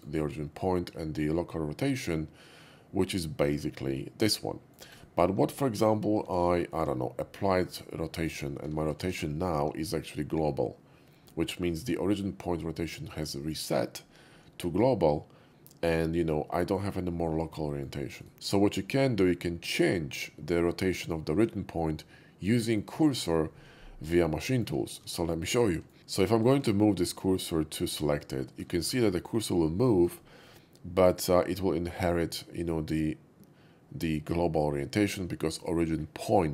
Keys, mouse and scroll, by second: 0.6-4.7 middle drag, 4.9-6.3 right drag, 8.0 ctrl+a, 8.0 click, 9.0 alt+x, 9.4-17.8 middle drag, 18.2-24.3 right drag, 24.3-24.6 middle drag, 24.9 shift+middle click, 25.6-25.9 shift+middle drag, 26.2 shift+s, 27.2 shift+s, 27.2 shift+s, 28.4 middle click, 28.8 shift+middle drag, 29.1-30.1 shift+middle drag, 30.2 shift+middle click, 30.5-31.1 shift+middle drag.